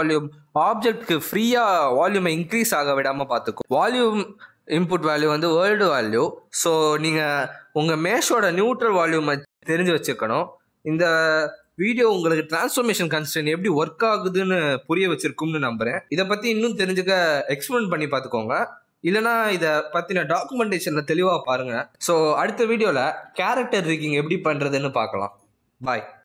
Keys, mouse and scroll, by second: 4.8 click, 7.1 scroll down 4, 7.4 middle click, 7.8 s, 9.6-10.4 scroll down 2, 9.7 middle click, 11.4 scroll up 1, 11.6 s, 13.4 middle click, 14.0-14.3 scroll up 2, 14.3 middle click, 15.2 shift+middle click.